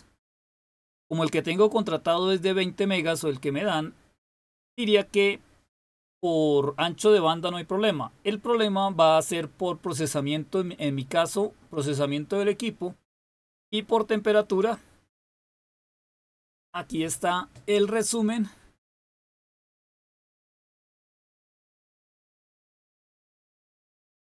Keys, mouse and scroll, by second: 20.9 click.